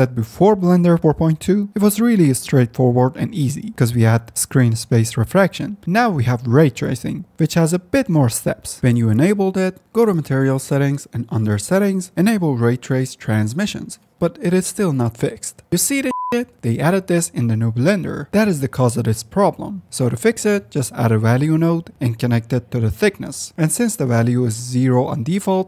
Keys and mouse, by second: 1.6 click, 7.1 drag, 8.1 click, 13.7 click, 15.6 click, 20.5 middle click, 20.8 shift+a, 22.3 click, 23.0 middle click, 25.1 middle click, 25.5 click.